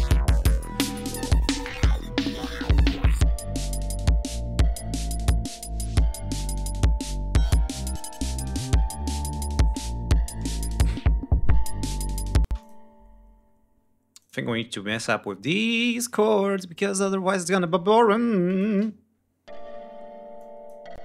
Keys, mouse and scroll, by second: 0.2-0.8 scroll up 5, 0.9 ctrl+scroll down 2, 3.9 ctrl+scroll up 2, 5.5-5.9 scroll down 2, 6.2 scroll down 2, 6.6-7.7 scroll up 4, 8.4-8.8 scroll down 2, 12.4 space, 12.5 click, 13.2 scroll up 2, 14.1 click, 17.4 ctrl+scroll up 2, 18.4 click, 18.6 space, 20.3 click, 20.9 space.